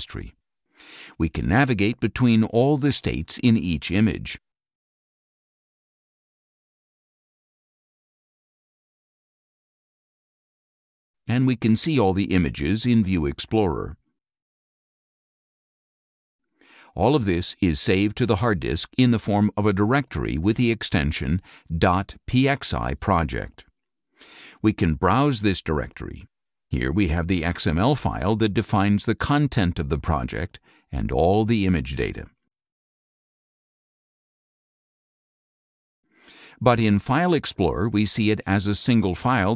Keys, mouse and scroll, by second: 0.2 click, 2.9 click, 5.2 click, 6.7 click, 8.6 click, 10.6 click, 21.5 click, 25.0 click, 26.6 click, 30.2 click, 32.9 middle click, 32.9-33.3 scroll down 1, 33.5 middle click, 33.5-33.9 scroll up 1, 34.0 middle click, 34.1 scroll up 2, 35.4 click, 37.2 click, 38.7 click.